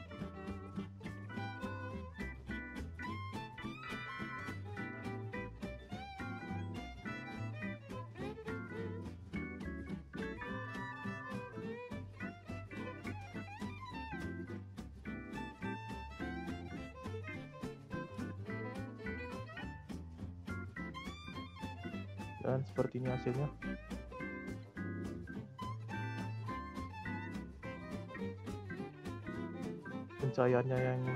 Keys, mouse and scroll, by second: 2.5 click, 4.3 scroll down 4, 4.5 middle click, 4.9-5.2 scroll up 3, 5.2 middle click, 6.1-7.7 drag, 7.7-8.1 scroll up 2, 8.1-10.7 scroll down 1, 10.7 click, 11.9-15.3 drag, 15.3 0, 17.6-19.8 drag, 30.0 scroll down 1.